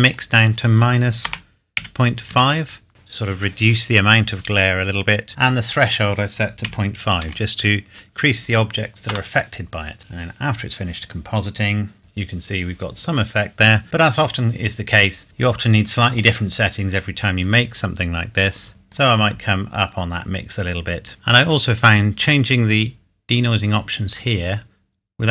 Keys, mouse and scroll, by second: 0.0 click, 1.2 KP_Subtract, 1.8 KP_Decimal, 2.3 KP_5, 2.9 KP_Enter, 5.8 click, 6.6 KP_Decimal, 7.2 KP_5, 12.0 scroll up 1, 12.4 scroll down 1, 15.2-16.5 scroll up 1, 16.5-16.8 scroll down 1, 18.7 click, 24.4 click.